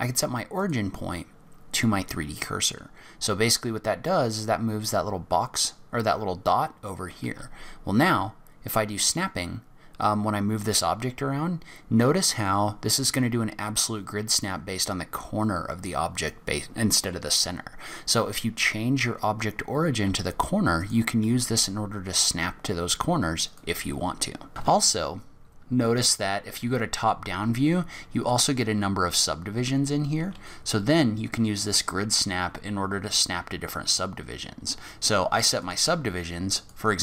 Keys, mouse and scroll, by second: 7.2 g, 19.9 g, 21.2 g, 24.5 middle click, 24.5 click, 24.5 scroll down 5, 25.1-26.0 scroll up 4, 30.2 g, 36.5 click.